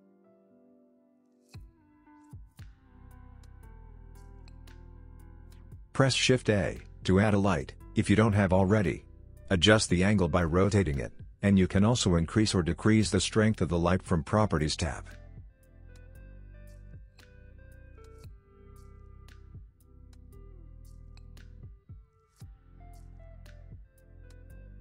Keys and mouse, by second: 1.8 middle click, 3.7 x, 6.1 shift+a, 9.0 g, 10.8 g, 20.3 r.